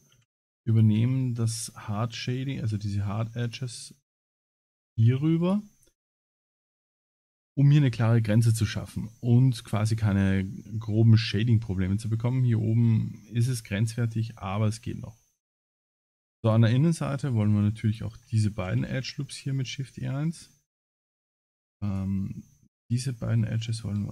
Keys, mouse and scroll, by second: 0.3 shift+e, 1.0 Tab, 1.2 middle click, 2.7 Tab, 3.4 shift+click, 4.2 alt+shift+click, 4.9 shift+r, 6.2 middle click, 6.6 Tab, 6.8 middle click, 10.1 middle click, 11.4 shift+middle click, 11.8 middle click, 14.8 Tab, 16.5 alt+click, 17.9 alt+shift+click, 18.7 shift+e, 20.3 alt+click, 21.3 shift+click, 21.9 shift+click, 22.9 shift+click, 23.1 middle click.